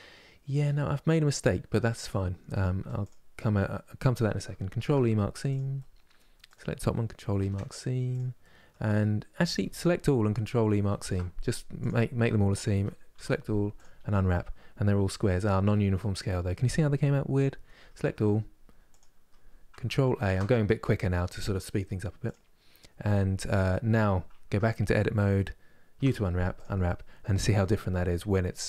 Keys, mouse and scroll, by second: 2.7 click, 5.2 ctrl+e, 5.4 middle click, 6.2 click, 7.8 ctrl+e, 8.1-9.3 middle drag, 9.3 a, 11.5 ctrl+e, 12.4 a, 13.5 u, 15.4-17.3 middle drag, 17.3 Tab, 17.7 a, 18.7 click, 22.0 ctrl+a, 24.2 Tab, 26.3 u.